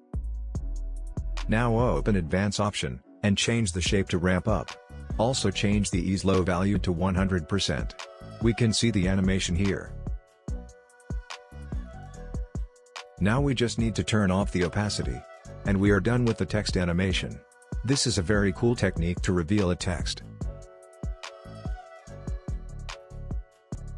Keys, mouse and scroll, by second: 2.6-3.3 scroll down 1, 3.3 click, 4.7-6.3 scroll down 1, 6.8-10.3 drag, 10.3 space, 11.9-14.5 drag, 14.5-15.6 scroll down 1, 15.6-18.9 drag, 18.9 space, 20.6-22.7 drag, 22.7 space.